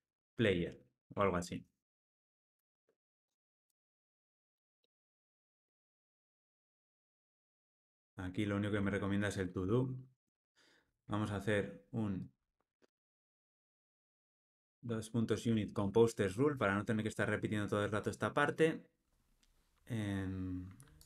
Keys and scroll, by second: 16.5 Return.